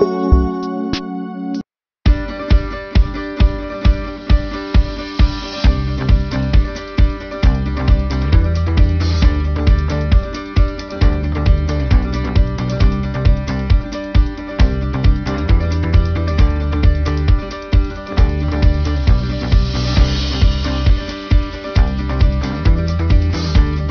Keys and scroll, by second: 5.0 ctrl+alt+z.